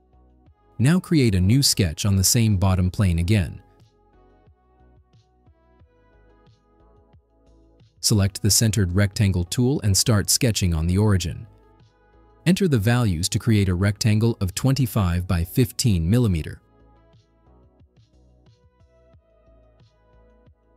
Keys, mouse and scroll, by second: 3.6 click, 5.6 click, 7.4 middle click, 7.8 middle drag, 8.9 click, 10.2 click, 14.6 5, 15.9 Tab, 16.7 1, 17.2 5, 18.4 Return.